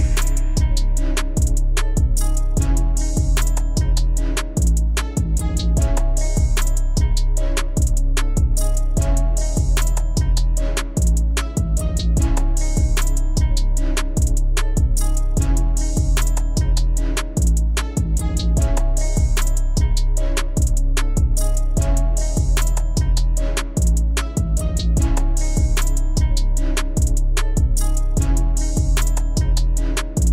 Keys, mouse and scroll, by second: 0.1 click, 0.6 KP_1, 1.6 g, 3.0 e, 4.5 e, 6.4 e, 7.7 click, 8.4 ctrl+shift+b, 9.3 ctrl+shift+b, 9.7 a, 11.0 q, 13.1 KP_1, 15.0 drag, 15.5 click, 16.6 Tab, 17.1 click, 17.6 click, 18.3 shift+d, 19.2 p, 19.9 click, 20.4 Tab, 20.6 click, 21.1 shift+a, 23.0 scroll down 1, 23.1 middle click, 23.5 Tab, 24.1 m, 25.0 KP_1, 25.6 g, 27.3 e.